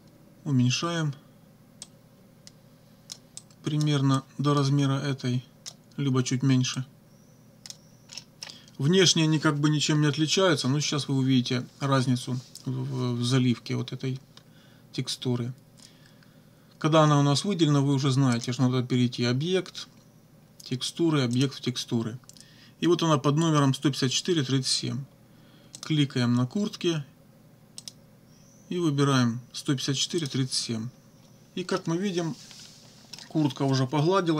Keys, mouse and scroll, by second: 1.8-3.3 drag, 3.4 click, 4.2-5.9 drag, 6.8-7.9 drag, 8.2 middle click, 18.4 click, 21.4 click, 25.8 click, 27.8 click, 30.2 click, 31.8-33.3 middle drag.